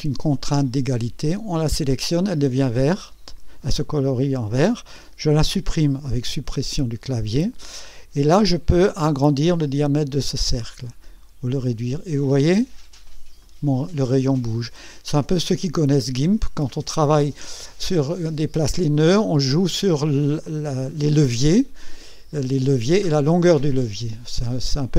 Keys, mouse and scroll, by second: 1.5 click, 6.3 Delete, 7.4-7.7 scroll down 1, 9.5-13.6 drag, 15.1-16.1 right drag, 24.2 scroll up 1, 24.7-24.9 right drag.